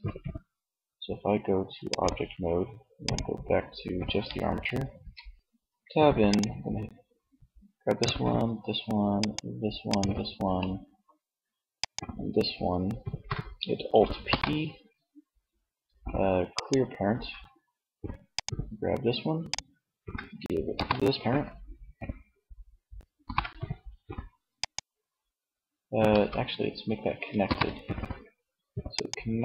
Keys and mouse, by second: 4.2 Tab, 13.7 alt+p, 20.2 alt+shift+p, 22.6 ctrl+p, 25.4 ctrl+z, 26.8 ctrl+p.